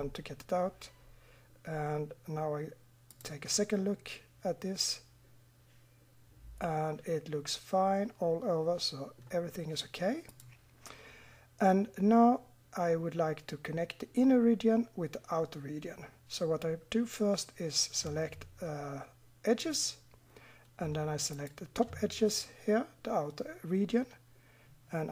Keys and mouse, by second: 3.1-4.0 drag, 4.0-4.9 middle drag, 10.3-16.4 middle drag, 19.6-23.9 middle drag.